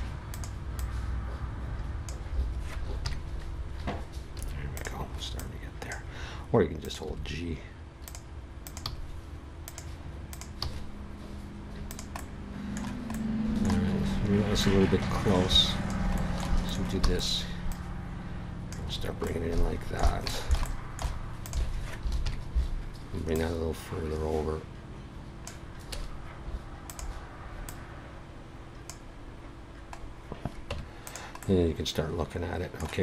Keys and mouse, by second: 3.0 KP_3, 4.4 a, 5.4-6.9 drag, 7.0 g, 8.8 g, 10.6 g, 14.6-16.3 drag, 16.9 e, 17.5 click, 19.3 click, 21.4 click, 22.2 KP_3, 25.9 a, 26.8-29.6 right drag, 30.0 middle click, 30.7 Tab.